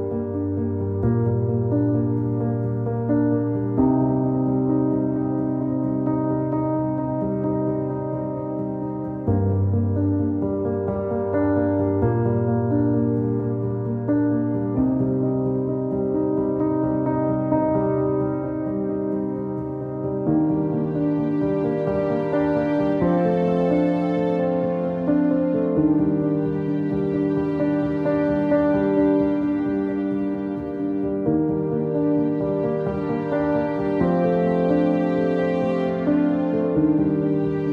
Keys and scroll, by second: 26.3 e, 27.5 ctrl+z, 28.6 w.